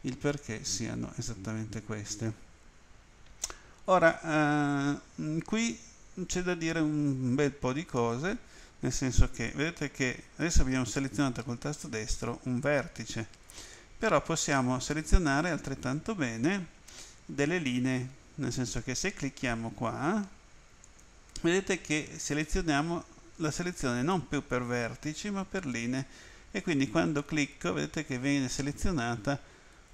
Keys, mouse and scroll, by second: 11.8 right click, 13.6 right click, 14.5 right click, 15.7 right click, 20.8 click, 26.7 right click, 28.2 right click, 29.7 right click.